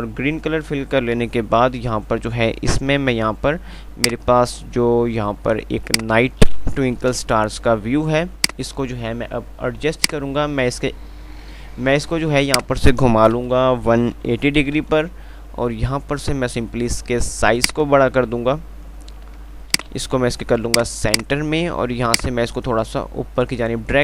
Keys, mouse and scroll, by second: 1.6 F3, 4.3-5.9 drag, 4.3 typing, 5.9 F2, 7.4 shift+Page_Up, 8.1 F2, 8.6 click, 8.8 F2, 10.2 click, 13.6 BackSpace, 20.1 c, 20.9-24.0 drag.